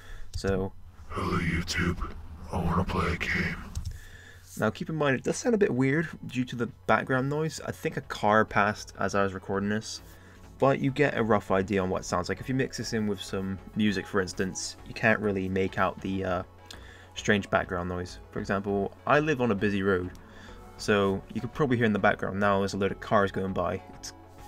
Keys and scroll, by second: 4.3 space.